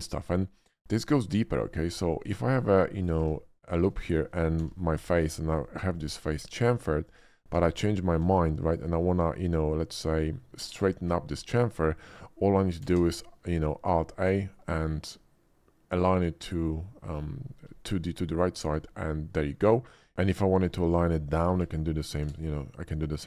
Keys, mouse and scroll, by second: 0.1 middle click, 0.5 middle click, 1.6 ctrl+r, 1.9 click, 2.4 click, 2.6 Tab, 2.9 click, 3.3 middle click, 3.7 shift+middle click, 3.9 shift+middle click, 4.5 e, 4.9 click, 5.2 Tab, 5.5 click, 6.6 ctrl+b, 7.1 click, 7.7 alt+middle click, 8.0 alt+click, 8.6 shift+click, 12.8 alt+a, 14.2 middle click, 17.8 alt+middle click, 18.3 alt+middle click, 20.0 ctrl+z, 21.5 alt+a, 22.2 alt+a.